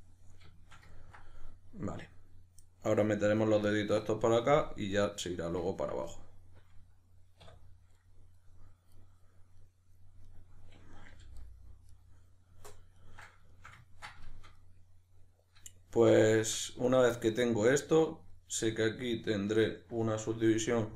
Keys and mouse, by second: 7.4 \, 9.0 right drag, 9.6-10.3 middle drag, 10.3 right click, 11.1 g, 11.9 right drag, 13.0 ctrl+right click, 13.5-16.9 shift+middle drag, 16.9 right click, 17.2-20.9 middle drag, 20.6 e.